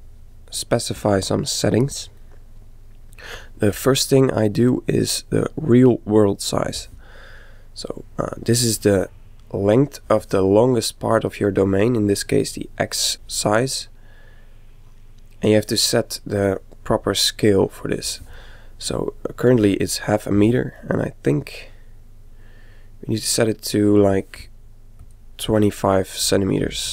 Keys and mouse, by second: 1.0 click, 2.3-5.2 middle drag, 2.7 click, 7.2-9.0 middle drag, 11.6-13.1 middle drag, 13.7-15.5 middle drag, 18.4-20.2 middle drag, 20.9-22.7 middle drag, 23.3-25.0 middle drag, 25.0 click.